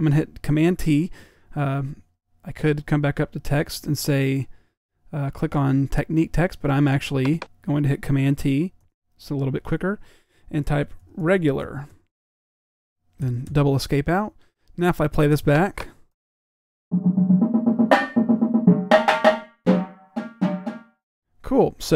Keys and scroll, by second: 10.6-13.1 typing, 16.1 typing, 17.2 p.